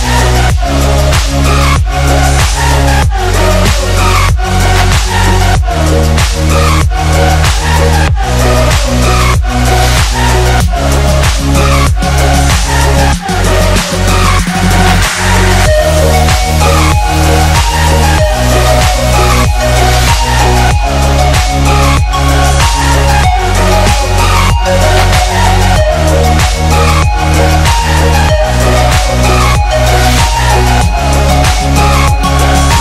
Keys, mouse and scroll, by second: 0.0 drag, 3.9 space, 4.1-4.5 click, 4.3 space, 4.5 click, 4.7 space, 5.1-5.7 drag, 6.7-7.7 alt+shift+click, 8.1 space, 8.3 click, 8.5 space, 8.9-9.4 drag, 12.6 ctrl+=, 12.8 space, 13.0 click, 13.2 space, 13.4 click, 13.6 space, 14.4 click, 16.4 ctrl+z, 16.9 space, 17.0-17.4 click, 17.3 space, 17.5 click, 17.6 space, 19.0 click, 22.4-23.0 space, 23.2 click, 24.7-25.4 shift+drag, 29.0 Right, 30.2 click, 30.5-31.0 space, 31.6 click.